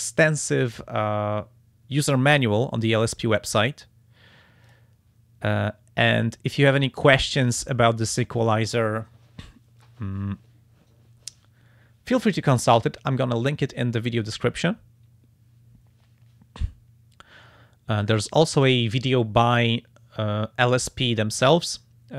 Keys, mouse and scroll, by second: 0.5 click, 3.5 click, 4.6 click, 6.6 click, 18.5 click, 21.3 click.